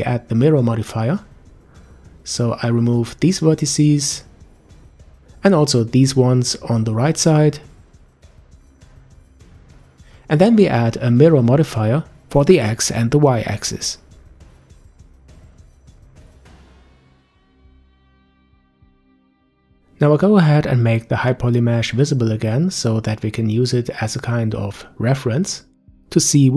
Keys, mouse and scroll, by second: 1.4-3.3 middle drag, 3.3 b, 5.4 Delete, 6.6-7.3 scroll down 3, 7.3-9.5 middle drag, 9.5-11.4 scroll up 1, 11.4 click, 12.4-15.4 drag, 18.6 click, 24.1 click, 25.9-26.5 middle drag.